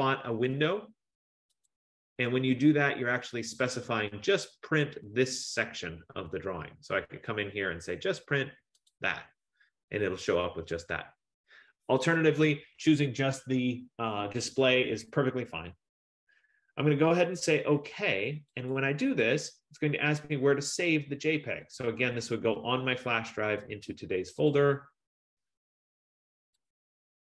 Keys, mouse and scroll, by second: 1.7 click, 3.7 click, 9.0 click, 18.8 click, 21.9 click, 22.5 F15, 24.6 click, 24.8 click, 26.8 click, 26.9 click.